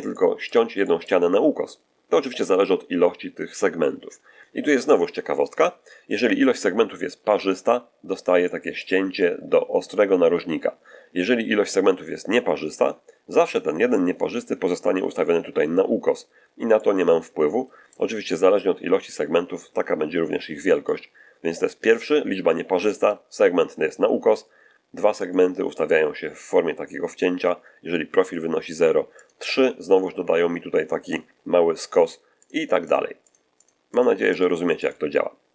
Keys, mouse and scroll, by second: 0.0 middle click, 0.7 middle click, 1.7-2.1 scroll up 1, 7.9 scroll up 1, 8.3 middle click, 12.7 click, 16.6-18.0 middle drag, 19.0-20.9 drag, 25.1 click, 29.1 click, 31.7 click, 32.3 click, 32.7 click, 33.1 click, 33.5 click, 33.8 click, 34.2 click, 34.7 click.